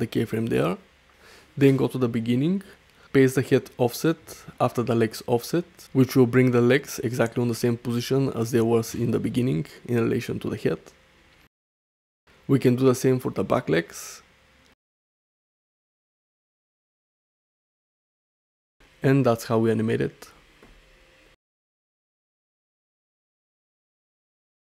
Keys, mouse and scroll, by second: 1.2 shift+Left, 4.0-5.9 drag, 6.5-7.1 middle drag, 7.3 shift+middle drag, 9.5 i, 11.7 shift+Right, 13.0 i, 14.7 shift+Left, 15.8-17.2 drag, 18.1 i, 18.8 middle click, 19.3 space.